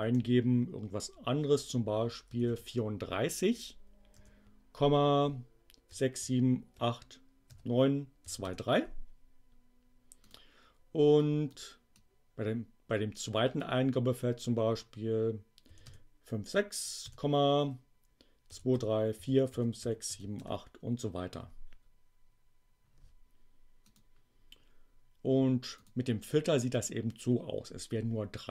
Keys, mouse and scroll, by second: 1.9-2.9 typing, 4.1 ., 5.5-8.4 typing, 10.2 click, 11.2 click, 11.9-13.7 drag, 15.4-16.9 typing, 18.2-20.9 typing, 24.0 click, 25.7 click, 26.7 click, 26.9-28.5 middle drag.